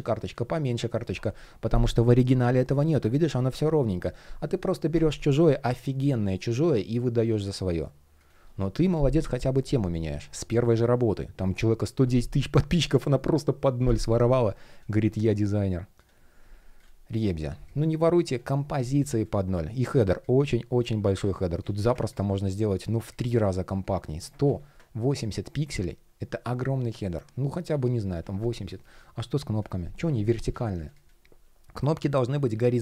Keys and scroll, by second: 19.4 shift+p, 20.8 super+z, 24.1 super+z, 28.3 shift+p, 29.7 super+z.